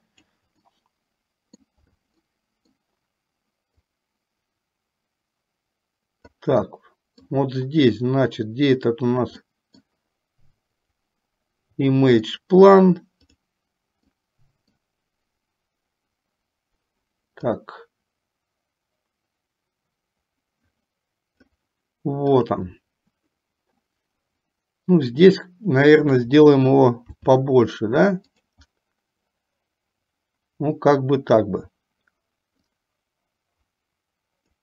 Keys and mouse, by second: 0.9 middle click, 2.3 middle click, 4.1-6.8 drag, 6.8 middle click, 9.6-10.8 middle drag, 11.2 click, 12.3 click, 13.4 click, 14.3 middle click, 17.7-24.3 drag, 27.2 s, 32.7-34.6 drag.